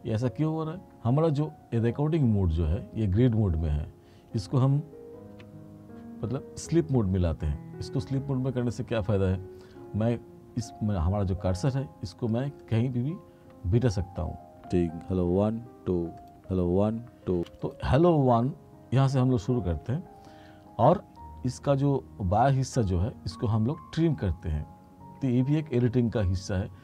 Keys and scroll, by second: 5.4 F2, 14.7 space, 16.2 space.